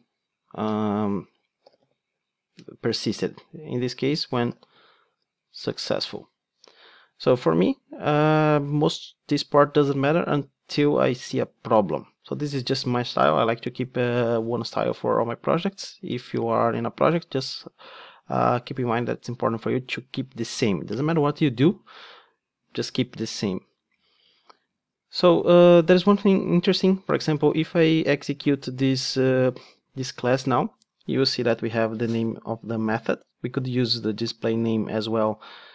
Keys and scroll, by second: 29.7 ctrl+d.